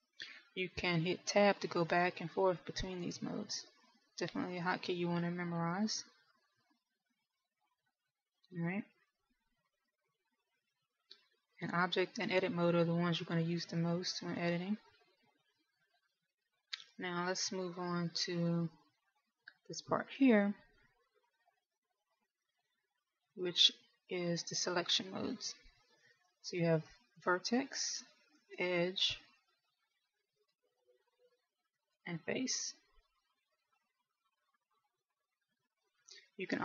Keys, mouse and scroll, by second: 3.2 Tab, 4.2 Tab, 5.2 Tab, 6.2 Tab, 7.2 Tab, 8.2 Tab, 9.9 middle click, 13.2 Tab, 14.2 Tab, 15.2 Tab, 16.1 Tab, 17.3 middle click, 28.8 click, 30.2 click, 32.1 right click, 33.3 click, 34.2 right click, 35.2 middle click.